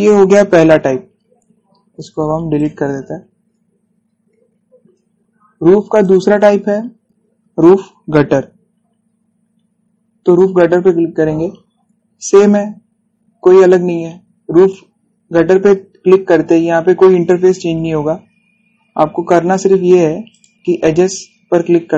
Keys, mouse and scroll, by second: 1.6 scroll down 1, 2.1 scroll up 1, 3.2 click, 6.7 click, 10.9 click, 12.2 scroll down 1, 15.6-16.0 scroll up 1, 19.7 scroll up 1, 21.0 click, 21.5 scroll down 1.